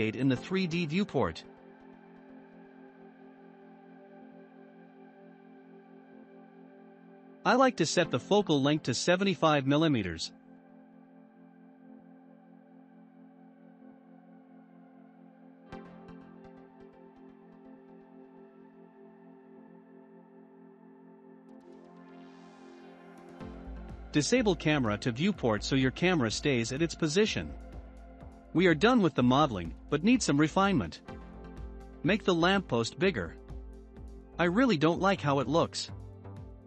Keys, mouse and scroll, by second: 4.2 n, 5.7 click, 6.5-9.5 drag, 9.8-10.3 scroll down 1, 10.3 scroll down 1, 11.0-20.6 shift+middle drag, 22.5 n, 24.5 click, 25.2 n, 25.5-26.3 scroll up 2, 26.3-27.3 middle drag, 27.3 scroll up 2, 28.3 click, 28.9 shift+click, 29.3 shift+click, 30.1-31.0 shift+drag, 31.1-32.2 shift+drag, 32.2-32.6 scroll up 5, 32.6-33.3 middle drag, 33.3-34.6 shift+drag, 34.6-35.1 drag, 35.1-35.9 scroll down 7, 36.0-36.6 middle drag.